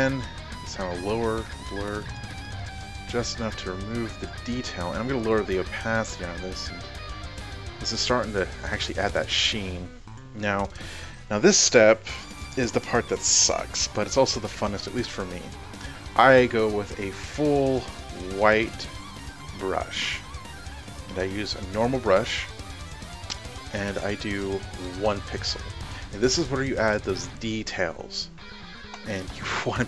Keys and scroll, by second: 23.7-25.5 typing.